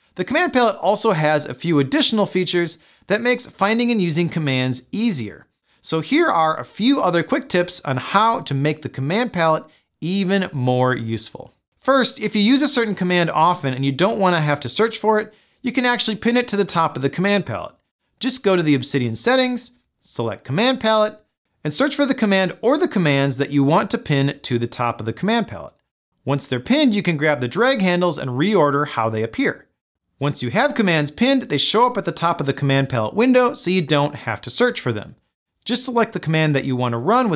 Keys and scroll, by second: 37.2 Down.